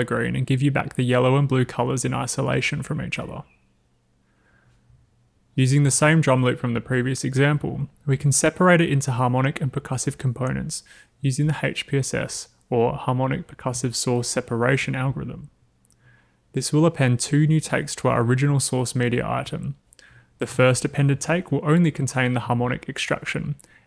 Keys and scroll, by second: 10.8 w.